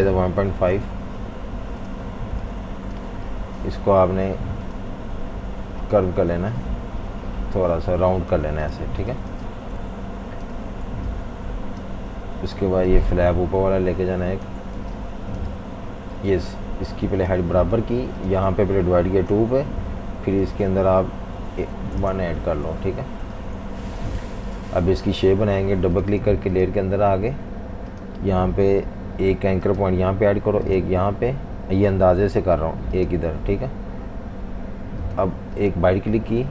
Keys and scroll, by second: 0.0-1.0 typing, 2.0-3.7 typing, 8.8 typing, 9.8 super+-, 9.9 super+-, 10.3-12.1 typing, 14.8 v, 14.9 space, 15.4 space, 18.8-19.3 typing, 21.4 typing, 22.0 Return, 22.6-23.9 typing, 25.0 v.